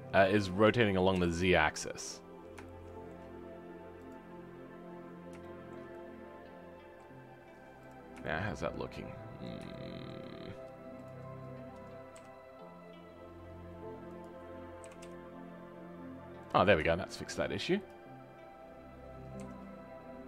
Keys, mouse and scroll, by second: 1.1 KP_7, 2.6-4.0 shift+middle drag, 4.0-5.4 drag, 5.4-7.8 shift+middle drag, 7.8 click, 8.2 shift+middle click, 8.6 scroll up 2, 8.9-11.0 middle drag, 11.0 click, 16.6 scroll down 2, 16.9 shift+middle click, 17.8 click, 18.1-19.3 scroll up 1, 19.3 r.